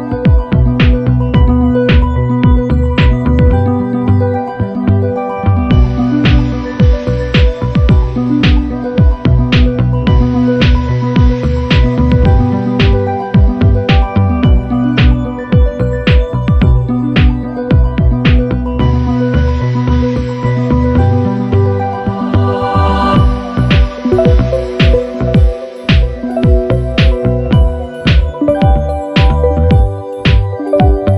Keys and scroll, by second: 8.2 super+=, 14.3 super+-, 16.2 super+=, 26.7 Up.